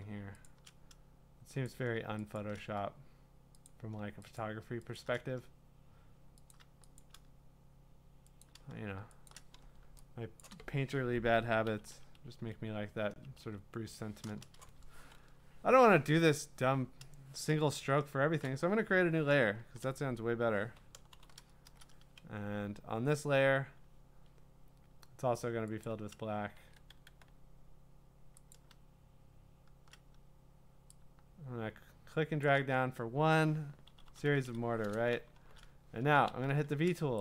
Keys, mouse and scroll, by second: 0.0 click, 0.5 shift+click, 1.7 click, 2.4 shift+click, 3.7 click, 4.4 shift+click, 5.0 shift+click, 6.5 click, 7.0 shift+click, 9.3 shift+click, 10.2-11.3 scroll, 10.4 click, 11.7-13.6 typing, 21.1 ctrl+shift+n, 25.8-26.6 scroll, 26.6 ctrl+z, 26.6 click, 26.9 d, 28.5-29.4 scroll, 30.6 click, 32.4 shift+click, 33.9-36.3 typing.